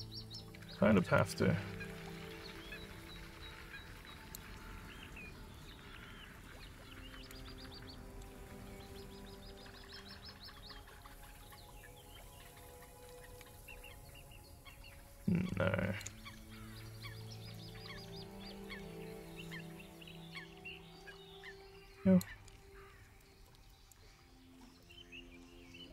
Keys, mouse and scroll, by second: 1.1-4.3 alt+drag, 5.4-7.3 alt+drag, 7.6 alt+middle click, 8.4 alt+click, 9.1 scroll, 9.1 scroll, 11.0 click, 12.3 click, 13.6-15.9 alt+drag, 16.3 ctrl+z, 17.0 alt+click, 18.3 click, 19.5-22.3 alt+drag, 22.6-23.0 scroll down 5, 23.3 alt+middle click, 23.7 alt+click, 24.9 click.